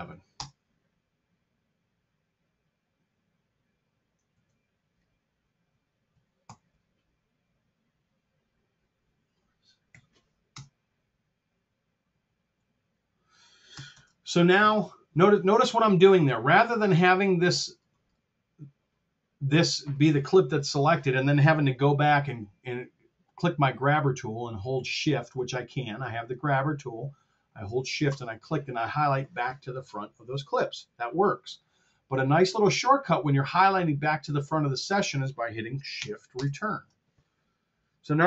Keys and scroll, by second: 0.3 Return, 4.2 super+z, 6.4 alt+r, 9.8 6, 10.4 shift+Return, 13.8 shift+Return, 36.2 shift+Return.